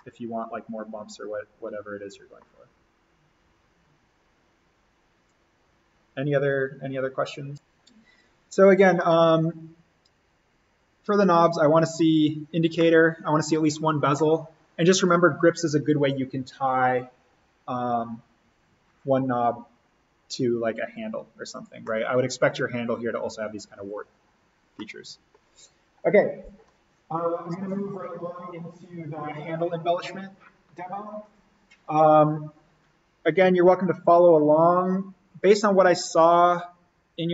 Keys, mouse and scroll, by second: 5.2-7.6 drag, 9.0-14.2 middle drag, 14.2 scroll up 1, 21.8-24.8 middle drag, 24.8-31.8 middle drag.